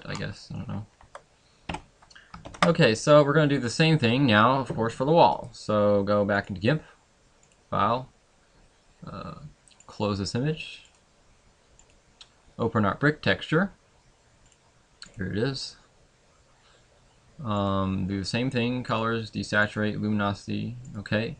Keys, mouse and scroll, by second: 1.8 Escape, 1.8 middle click, 1.8 scroll down 9, 2.6 ctrl+s, 5.4 right click.